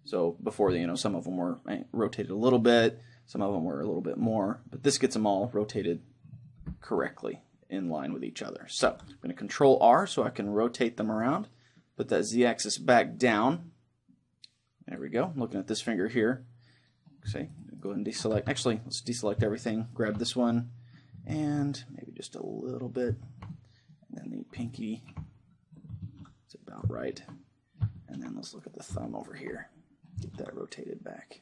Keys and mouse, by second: 8.9 ctrl+r, 15.2-17.1 drag, 16.3-18.1 middle drag, 17.5 click, 17.5-22.1 right drag, 18.4 a, 20.3-22.1 drag, 20.3-21.6 middle drag, 21.5 ctrl+r, 23.1-25.0 drag, 23.3-28.1 middle drag, 24.2-26.7 right drag, 26.2 ctrl+r, 26.8-29.7 drag, 28.2-31.4 middle drag, 28.7-31.1 right drag, 30.4 ctrl+r.